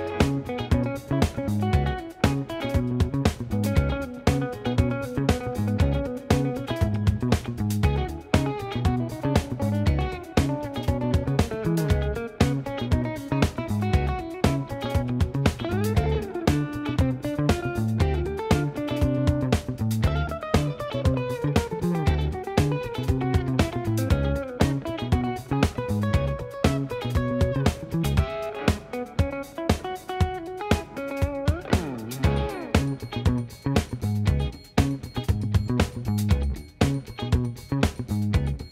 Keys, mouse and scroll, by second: 2.4 click, 5.3 click, 14.7-16.6 drag, 17.8-19.1 drag, 24.7-25.7 drag, 28.0 g, 29.9 click, 30.9 Escape, 36.6 ctrl+shift+z, 37.0 shift+click.